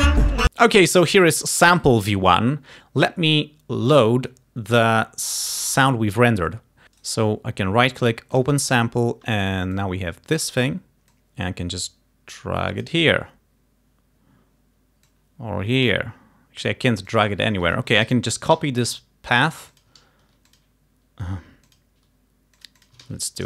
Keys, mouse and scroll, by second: 7.1 right click, 8.4 click, 9.5-10.8 drag, 11.2-13.1 drag, 15.2 click, 17.1 click, 18.1 ctrl+a, 18.6 ctrl+c, 19.8 ctrl+click, 20.5 ctrl+click, 21.7 click, 22.6-23.4 drag, 23.1 ctrl+v.